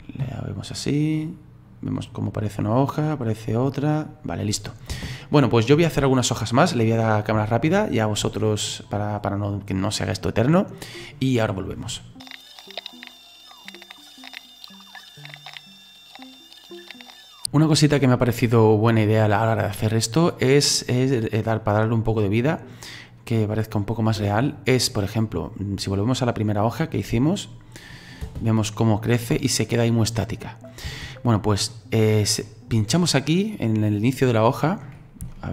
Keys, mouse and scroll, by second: 4.9 space, 5.6-7.9 middle drag, 7.9-8.3 scroll up 2, 8.3-11.3 shift+middle drag, 12.1 shift+middle click, 12.2 right click, 12.2-16.9 typing, 12.3 click, 12.5 click, 12.5 middle click, 12.6 click, 12.7 click, 12.8 click, 13.0 right click, 13.0 click, 13.1 click, 13.2 middle click, 13.3 click, 13.5 click, 13.7 click, 13.9 click, 14.0 middle click, 14.1 scroll down 2, 14.1 click, 14.2 right click, 14.2 ctrl+c, 14.3 click, 14.4 click, 14.6 click, 14.8 click, 14.9 middle click, 14.9 click, 15.1 click, 15.3 Delete, 15.3 click, 15.4 ctrl+z, 15.5 click, 15.5 shift+right click, 15.6 click, 15.7 right click, 15.7 right click, 15.8 click, 16.0 middle click, 16.1 scroll up 3, 16.2 click, 16.5 middle click, 16.6 click, 17.0 shift+middle click, 17.2 right click, 17.3 click, 27.1-28.2 drag, 28.2 space, 30.9 space, 31.7-33.8 middle drag, 33.8 click, 34.7 middle click, 35.0-35.3 scroll up 4, 35.3 shift+middle click.